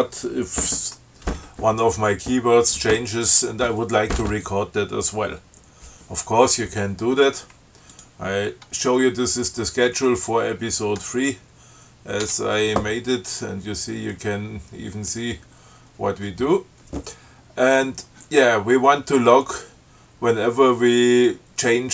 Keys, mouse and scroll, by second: 8.2 click, 12.7 Tab.